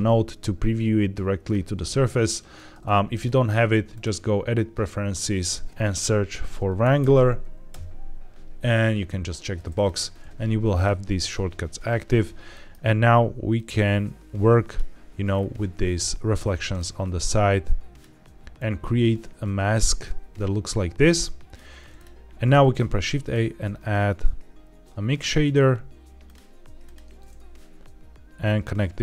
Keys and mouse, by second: 3.1-4.0 drag, 12.5 middle click, 13.4-14.6 drag, 16.7-17.9 drag, 18.4-21.5 drag, 21.8 click, 22.5 shift+a, 28.3-29.0 drag.